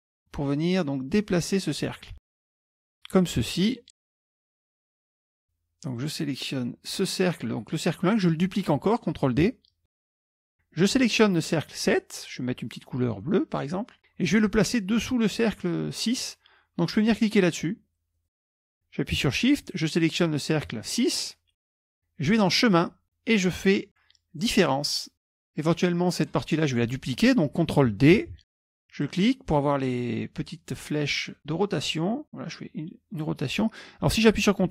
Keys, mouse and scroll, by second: 1.3 click, 2.2 Right, 2.5 Down, 2.5 Down, 6.0 click, 10.0 ctrl+d, 10.5 click, 13.2 click, 18.2 click, 20.1 shift+click, 22.4 click, 24.5 click, 28.3 ctrl+d, 29.1 click, 31.4-33.6 drag.